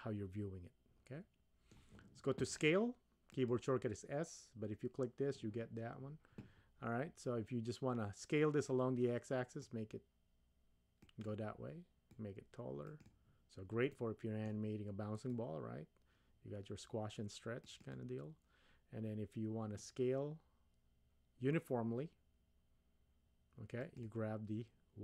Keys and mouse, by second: 3.3 click, 9.6-11.3 drag, 12.1-13.1 drag, 13.9-14.5 middle drag, 15.4-17.9 drag, 19.9-24.0 drag.